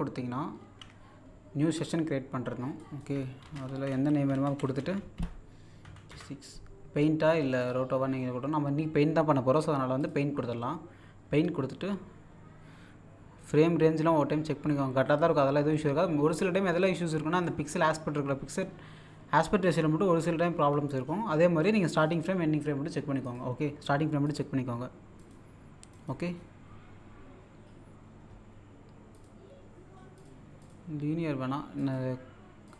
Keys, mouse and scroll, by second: 0.6 ctrl+n, 2.7 click, 3.2-5.6 typing, 7.6 click, 10.0 click, 17.5 click, 22.0 click, 23.4 click, 27.4-27.8 scroll down 1, 29.1 click, 31.7 typing, 31.9 click.